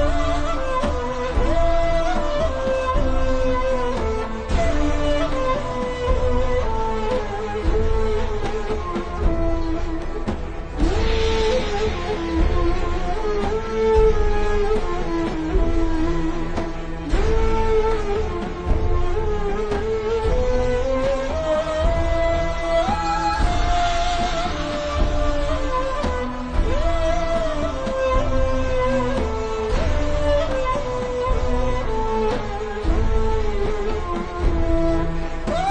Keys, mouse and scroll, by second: 6.1 BackSpace, 6.5 click, 6.6 BackSpace, 7.0 click, 7.2 BackSpace, 8.3 ctrl+z, 8.5 click, 9.7 BackSpace, 10.5 click, 11.8 BackSpace, 12.8 click, 14.0 BackSpace, 14.5 click, 17.6 BackSpace, 18.0 click, 18.4 BackSpace, 18.9 click, 19.9 BackSpace, 20.1 click, 20.5 BackSpace, 21.1 click, 22.4 BackSpace, 24.1 click, 24.4 BackSpace, 25.6 click, 29.4 BackSpace, 32.1 q, 33.2 click.